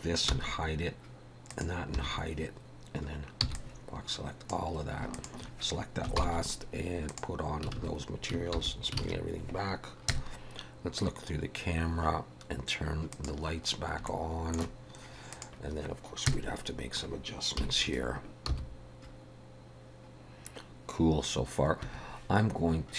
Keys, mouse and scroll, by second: 0.3 h, 1.5 click, 2.0 h, 3.4 b, 5.1 shift+click, 6.2 ctrl+l, 7.8 alt+a, 8.6 alt+h, 9.0 alt+a, 10.1 KP_0, 13.2 click, 14.1 shift+middle click, 15.3 click, 16.3 KP_0, 17.6 KP_7, 18.5 g.